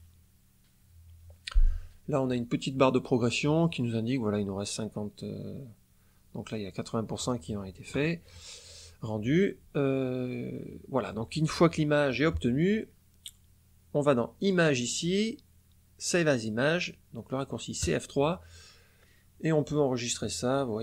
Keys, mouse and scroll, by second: 14.3 click, 17.7 click.